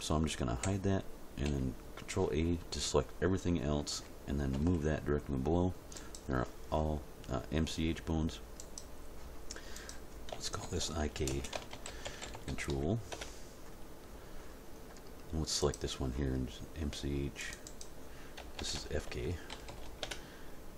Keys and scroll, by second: 0.6 h, 1.4 a, 4.6 m, 10.6-12.7 typing, 13.1 Return, 18.4 BackSpace, 19.5 shift+f, 19.7 shift+k, 20.0 Return.